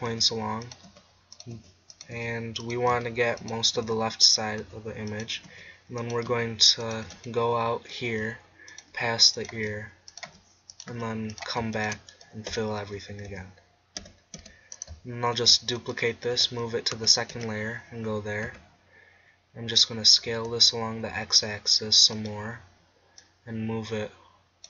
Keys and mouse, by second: 0.0-7.0 typing, 8.2-10.9 typing, 12.6 f, 13.0 a, 13.3 a, 14.0 f, 14.4 Tab, 15.4 shift+d, 16.4 m, 17.4 2, 18.5 Tab, 20.2 s, 22.3-24.6 drag.